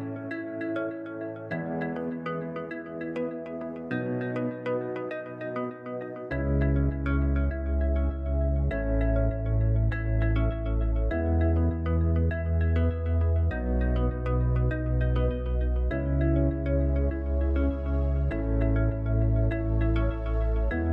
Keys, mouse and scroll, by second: 2.1 click, 3.4-6.5 drag, 14.0-20.5 drag.